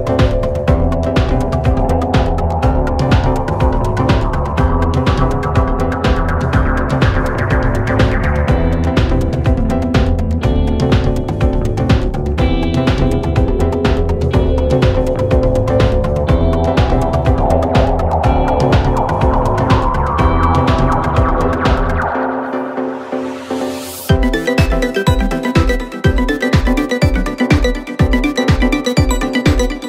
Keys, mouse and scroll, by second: 2.4 KP_0, 3.4 KP_0, 3.7-4.1 scroll down 3, 5.2-6.7 drag, 7.3 click, 8.8 click, 9.0 click, 9.7-11.2 drag, 11.2 0, 14.0 0, 15.3 click, 15.6 click, 16.6 click, 17.2-18.7 drag, 18.9 scroll down 1, 19.0-19.4 middle drag, 19.4 click, 20.1 KP_0, 21.0 r, 24.9 click, 25.4 g, 26.6 g, 29.0 g.